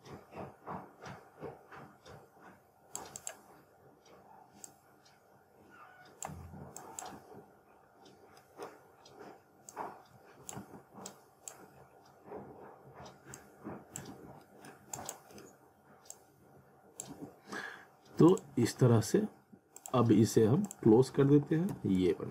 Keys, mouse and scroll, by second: 3.7-4.1 scroll up 1, 4.7 click, 7.2 z, 7.7-8.1 scroll up 1, 8.4 middle click, 9.0-9.4 scroll up 1, 9.7 click, 10.6 z, 11.1 click, 11.8 scroll up 1, 13.4 click, 14.1 z, 14.4 middle click, 14.9 click, 15.3-15.7 scroll up 1, 16.1 click, 17.1 z, 18.3 click, 18.5 z, 20.1 click, 21.1 alt+w, 21.7 z, 22.1 alt+middle click.